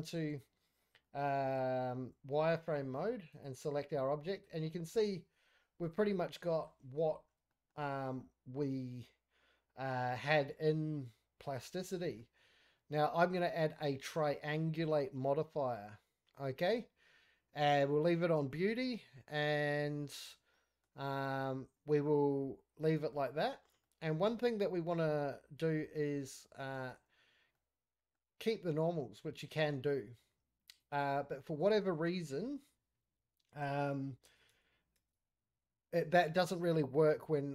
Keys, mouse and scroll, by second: 0.2 z, 0.3 z, 0.7-1.0 scroll down 2, 0.9 scroll up 1, 1.0 middle click, 1.3 scroll down 1, 1.4 scroll up 1, 1.6 z, 2.5 scroll up 3, 2.7 middle click, 3.1 scroll down 2, 3.2 scroll up 1, 3.3 click, 3.8 scroll up 2, 4.0-5.8 middle drag, 6.0-6.4 scroll down 3, 6.4 middle click, 6.7-7.1 scroll up 4, 7.1 shift+middle drag, 7.3-8.2 shift+scroll down 4, 7.5 middle click, 8.2-12.2 middle drag, 12.4-13.7 scroll down 1, 13.7-16.7 drag, 20.2 scroll down 2, 20.5-20.8 middle drag, 21.0 scroll up 2, 21.3-23.1 middle drag, 23.5-23.8 scroll down 1, 23.8-24.8 middle drag, 25.0 scroll up 1, 25.3-25.9 middle drag, 26.7 z, 27.5-28.1 middle drag, 29.1 click, 30.8 click, 31.4 click, 31.8 click, 35.5 scroll down 1, 36.3 scroll up 1.